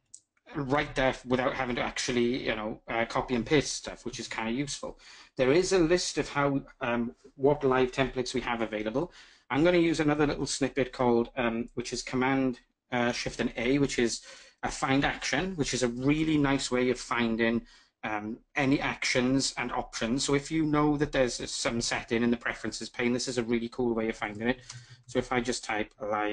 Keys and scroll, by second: 9.9 ctrl+shift+super+a.